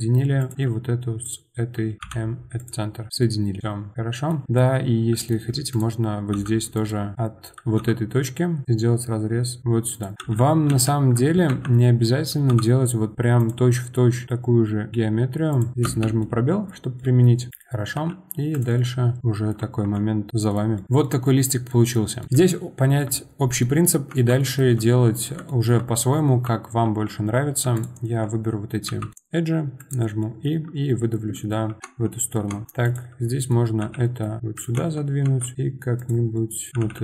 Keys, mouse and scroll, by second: 0.4 click, 1.2 shift+click, 2.0 m, 3.2-5.7 middle drag, 5.7 click, 6.3 k, 7.8 k, 12.5 k, 16.2-17.9 middle drag, 17.9 g, 18.8 middle click, 19.6 Tab, 19.9 middle click, 20.3-21.7 scroll down 7, 20.5 middle click, 21.0 middle drag, 21.7-24.1 middle drag, 24.1 Tab, 24.4-25.9 middle drag, 25.9-26.8 scroll up 1, 26.8 2, 27.7 alt+click, 28.8 e, 31.8 Tab, 32.5 Tab, 32.8 click, 33.3 middle click, 33.8 g, 34.7 Tab, 35.2 Tab, 36.0 click, 36.3 middle click, 36.7 g.